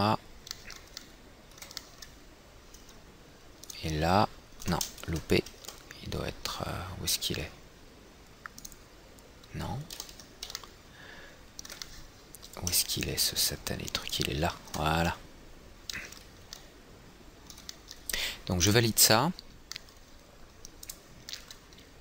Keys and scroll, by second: 5.5 ctrl+z, 10.5 ctrl+z, 11.1 ctrl+z.